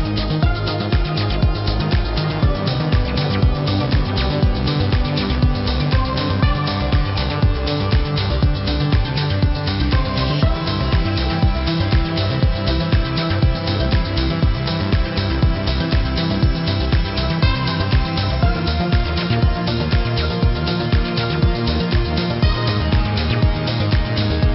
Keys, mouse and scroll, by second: 0.5-1.4 typing, 1.0 click, 1.6 click, 5.9 b, 6.4 z, 6.9 click, 8.6 ctrl+z, 10.0-11.1 typing, 10.1 click, 10.5 click, 10.9 click, 11.3 click, 12.4 v, 12.6 click, 12.8 Up, 13.1 Right, 13.6 click, 14.0 space, 14.1 click, 15.1 =, 15.2 click, 15.4 Right, 16.5 Up, 16.9 ctrl+z, 16.9 ctrl+z, 16.9 typing, 17.8 Up, 18.6 click, 18.9 Right, 19.5 click, 19.7 Left, 20.2 a, 20.5 Left, 21.1 click, 21.3 Right, 21.8 click, 22.3 click, 23.4 v, 23.7 click, 24.4 a.